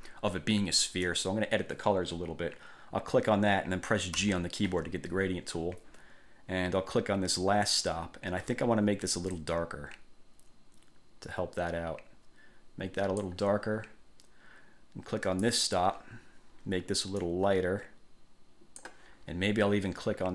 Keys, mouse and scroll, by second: 1.2 click, 4.3 g, 7.8 click, 9.5-13.6 drag, 15.4 click, 17.4 click.